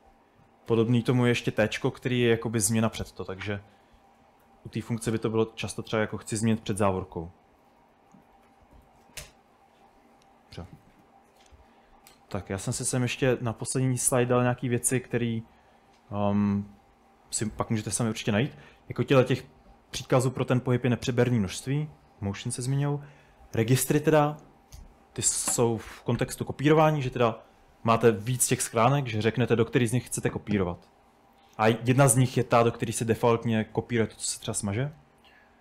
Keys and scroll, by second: 0.0-2.0 typing, 3.9-9.7 typing, 8.5 Escape.